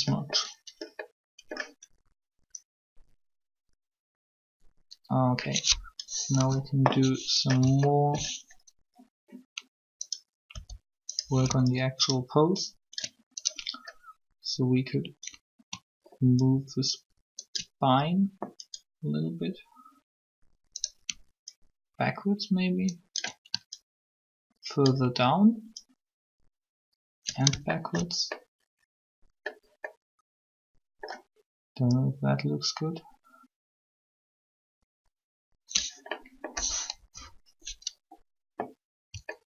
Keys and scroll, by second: 6.3 3, 10.5 r, 36.7 3.